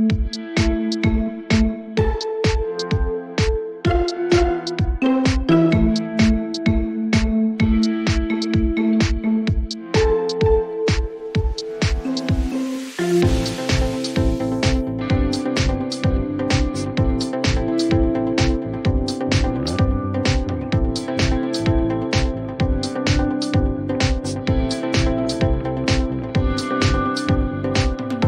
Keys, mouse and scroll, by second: 0.0-0.6 typing, 0.6 click, 3.2 click, 4.7 click, 7.5 click, 7.9-8.3 scroll, 8.9-10.3 scroll, 10.4 shift+click, 10.8-12.7 scroll down 7, 12.7 click, 15.6 click, 16.2 right click, 19.6 click, 22.6 click, 25.9 click, 26.5 click.